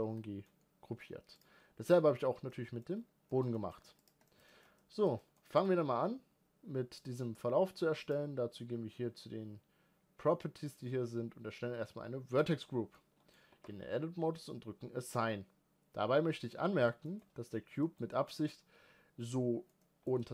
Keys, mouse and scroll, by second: 0.2 scroll down 2, 0.5-1.4 middle drag, 1.4 click, 2.5 middle click, 2.9-3.3 scroll up 2, 3.3-3.7 shift+middle drag, 3.8 scroll up 1, 4.0 click, 4.3-12.4 shift+middle drag, 12.4 click, 12.9-13.5 middle drag, 13.5 Tab, 15.1-16.7 drag, 16.7-20.3 middle drag.